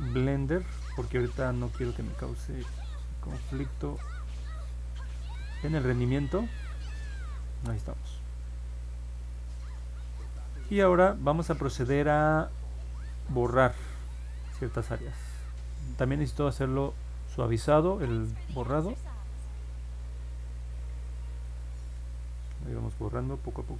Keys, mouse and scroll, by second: 3.9 click, 6.6 click, 14.2-15.5 drag, 17.3 click, 18.9-20.2 drag, 21.9 click, 22.4 click, 22.8 click, 23.2 click, 23.5 click.